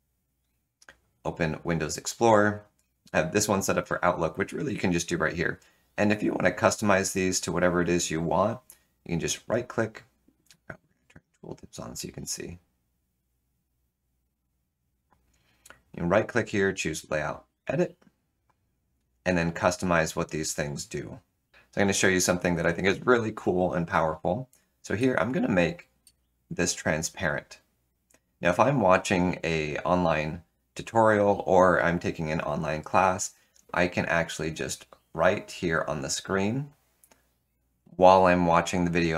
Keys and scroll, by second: 21.5 Delete.